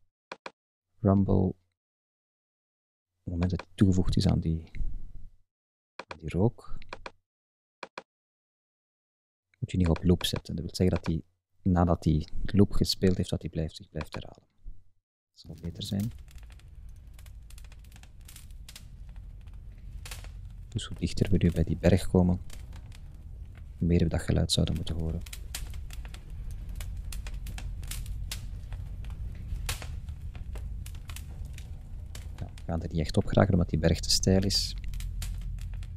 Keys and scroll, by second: 16.6 Up, 16.9 Left, 17.1 Up, 18.6 Left, 18.8 Up, 19.4 Right, 19.5 Up, 19.9 Right, 20.1 Up, 20.6 Right, 20.7 Up, 27.9 Left, 28.1 Up, 28.5 Right, 28.7 Up, 30.2 Right, 30.3 Up, 33.1 Up, 33.3 Left, 33.5 Up, 35.2 Right, 35.5 Up.